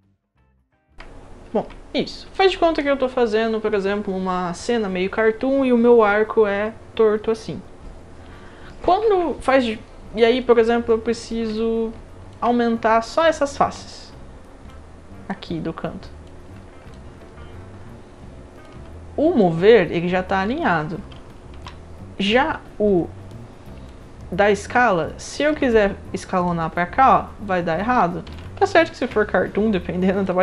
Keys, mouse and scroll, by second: 0.3 right drag, 0.5 click, 0.6 alt+drag, 0.9 alt+middle click, 2.3 click, 11.3 middle click, 11.5-12.3 alt+drag, 13.2 click, 13.7-14.7 right drag, 15.3-16.2 drag, 16.9-18.6 alt+drag, 19.4-20.3 drag, 20.6 ctrl+z, 21.5 r, 23.9-25.5 alt+drag, 26.4-27.4 drag, 28.2 ctrl+z, 28.7 alt+drag, 29.7-30.2 drag.